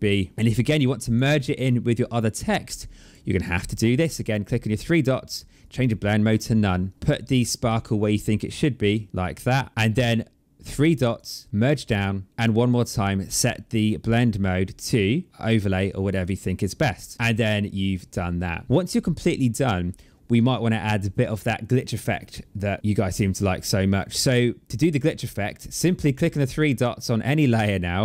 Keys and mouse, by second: 2.9 click, 5.5 click, 8.5 click, 10.6 click, 13.9 click, 15.3 click, 26.3 click.